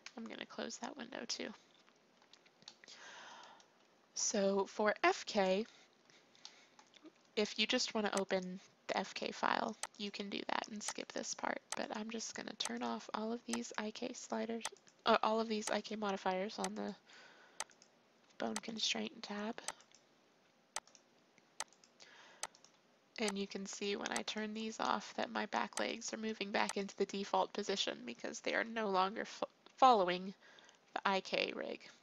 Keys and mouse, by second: 0.0 t, 7.0 click, 7.6 click, 14.4-15.7 drag, 16.4 click, 17.7 click, 19.6 click, 20.4 click, 24.8-26.7 middle drag, 27.3-28.5 middle drag, 28.5 KP_3.